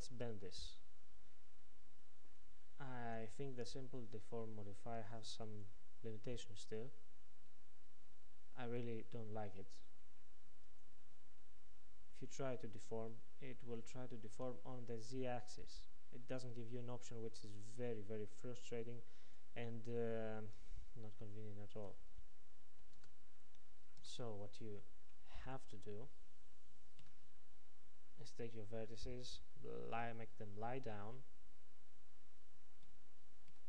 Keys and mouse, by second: 0.2 Tab, 2.6-8.8 drag, 10.7-15.0 drag, 21.8-23.7 drag, 24.0 Tab, 25.5-30.4 drag, 27.0 a, 32.9 r.